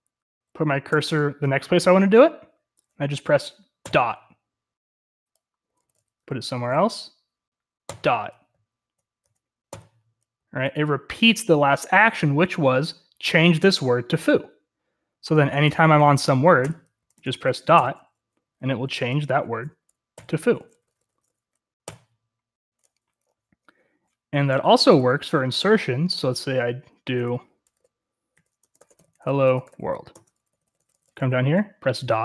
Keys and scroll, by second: 0.8 j, 5.6-6.7 typing, 7.8-10.8 typing, 15.6-21.8 typing, 24.6 typing, 26.3 o, 27.1 Return, 27.7-31.0 typing.